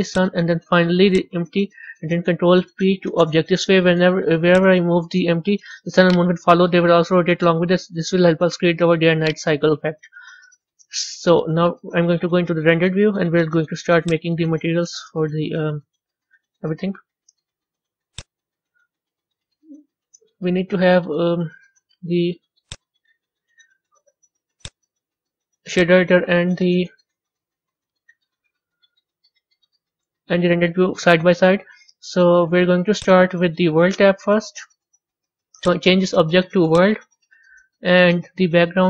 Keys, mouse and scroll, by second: 0.0 shift+click, 1.0 shift+click, 2.3 ctrl+p, 4.4 click, 5.2 g, 6.8 r, 10.4 a, 11.0-12.7 middle drag, 12.7 z, 18.0-21.1 drag, 22.0 z, 22.7 z, 24.5-25.7 drag, 25.8-27.1 drag, 27.1 n, 33.0-38.8 drag.